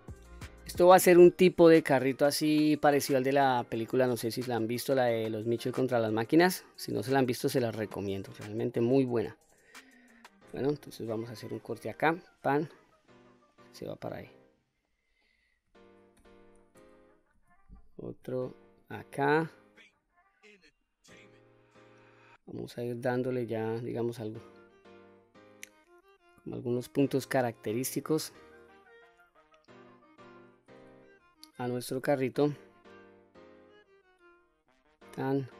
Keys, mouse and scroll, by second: 1.0 q, 1.5-3.5 scroll up 2, 3.5-3.9 scroll up 1, 4.0 middle click, 5.1-5.5 scroll down 2, 5.8 middle click, 6.6-7.2 scroll up 2, 7.2-8.2 scroll down 1, 8.2 middle click, 9.0-9.5 scroll up 2, 9.5 middle click, 11.4 ctrl+r, 12.9 click, 13.5 middle click, 14.9 middle click, 16.2 2, 17.4 ctrl+r, 20.6 click, 23.0 ctrl+r, 26.6 click, 27.4 middle click, 28.8-30.4 middle drag, 31.6 ctrl+r, 34.7 click, 35.4-35.5 middle drag.